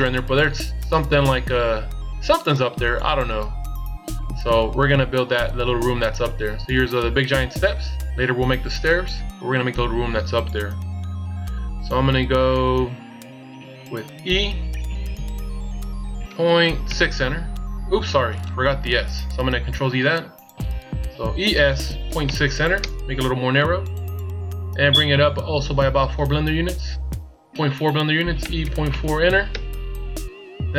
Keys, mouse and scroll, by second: 14.1 e, 19.7 ctrl+z, 21.1 e, 28.2 e, 30.1-30.7 shift+scroll up 2.